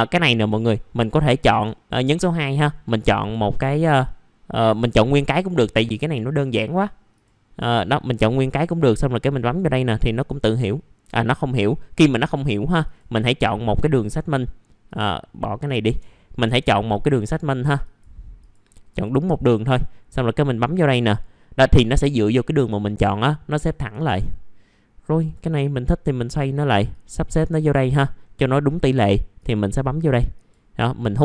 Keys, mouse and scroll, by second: 0.6 click, 3.7 click, 4.4-6.6 scroll down 1, 6.6 click, 10.5 middle click, 10.6 scroll down 1, 12.2 click, 13.6-14.5 scroll up 1, 14.8 click, 22.1 middle click, 22.2-22.6 scroll down 1, 23.5 middle click, 25.1 click, 27.8 middle click, 28.1-29.4 scroll down 1, 29.4 click.